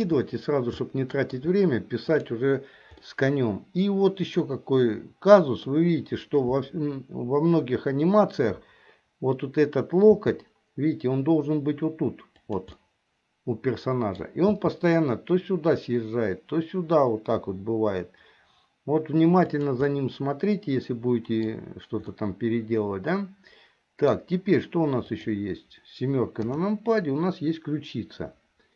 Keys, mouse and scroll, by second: 0.9 shift+middle click, 2.2 click, 3.2-5.8 middle drag, 10.1 g, 13.0-14.3 middle drag, 14.7 g, 20.0 scroll up 1, 20.1-21.7 middle drag, 22.3-24.3 middle drag, 25.2 click, 26.5 KP_7.